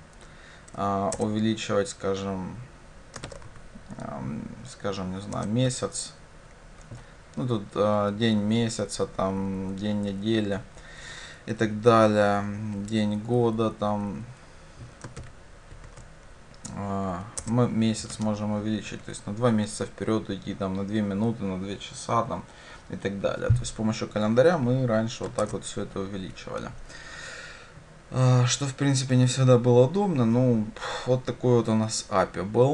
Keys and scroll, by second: 1.2 Return, 17.4 Return, 25.5 shift+Return.